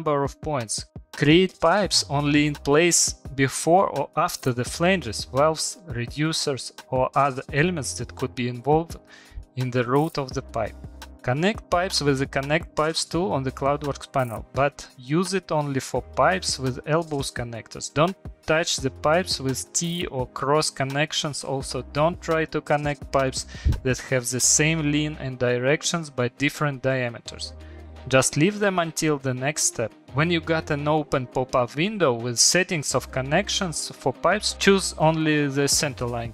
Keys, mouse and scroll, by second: 0.8 click, 1.3 click, 2.0 click, 2.5 middle click, 2.8 scroll, 3.1 middle click, 3.6 click, 3.7 click, 3.7 scroll down 1, 4.3 scroll, 4.3 click, 4.8 middle click, 5.7 shift+middle click, 5.8 middle click, 6.1 click, 6.4 click, 6.9 click, 7.3 scroll, 8.0 scroll, 8.6 scroll, 8.9 click, 9.0 click, 9.5 click, 10.1 middle click, 10.1 scroll, 10.6 click, 11.6 click, 11.6 middle click, 12.0 click, 12.7 middle click, 14.8 shift+middle click, 15.7 click, 17.2 click, 17.7 click, 18.5 click, 19.7 click, 20.4 click, 21.5 Return, 23.3 Return, 24.2 click, 25.5 click, 26.4 click, 26.6 Return, 27.2 Return, 28.1 click, 28.8 click, 29.4 click, 29.5 Return, 30.5 middle click, 31.3 Return, 32.1 click, 32.9 click, 33.7 click, 34.1 Return.